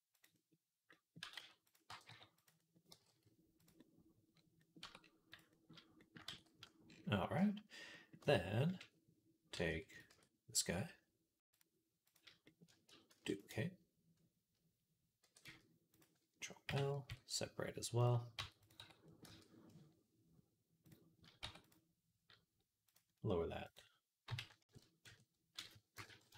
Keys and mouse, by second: 1.0 g, 1.7 g, 2.7 g, 4.6 Tab, 4.8 middle click, 5.3-7.7 middle drag, 6.2 ctrl+s, 8.0 Tab, 8.0-12.3 middle drag, 9.5 Tab, 9.9 Tab, 11.2 click, 12.9 shift+d, 15.1 e, 16.5 ctrl+l, 16.9 p, 18.2 Tab, 18.6 Tab, 19.1 a, 21.2 Tab, 21.4 click, 22.7-24.2 drag, 24.4 KP_0.